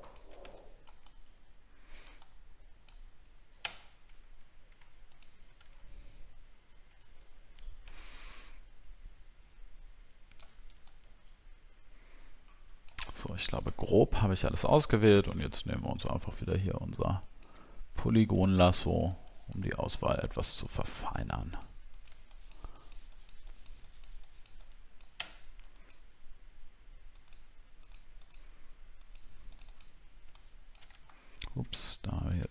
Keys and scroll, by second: 5.7 alt+scroll down 1, 6.5 alt+scroll down 1, 14.8 alt+scroll up 1, 15.4-15.7 alt+scroll up 2, 31.1-31.7 alt+scroll down 6.